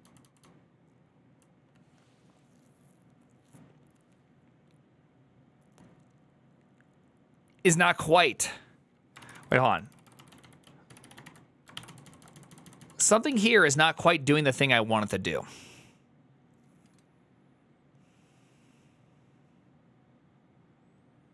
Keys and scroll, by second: 0.0-1.4 typing, 9.6 ctrl+c, 9.6-13.9 typing.